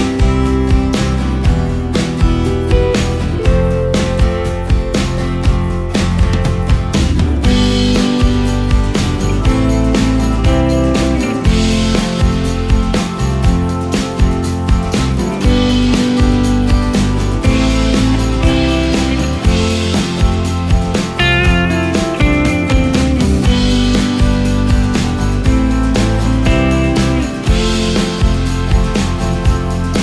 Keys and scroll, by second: 1.8 ctrl+space, 9.8 ctrl+space, 12.0 ctrl+r, 19.7 Delete, 21.6 ctrl+g, 25.3 ctrl+space.